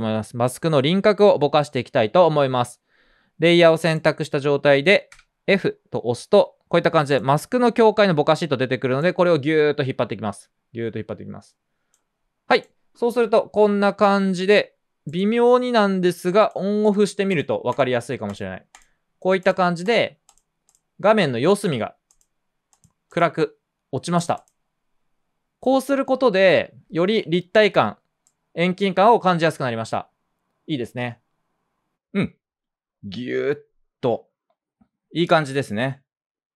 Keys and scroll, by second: 4.3-5.1 typing.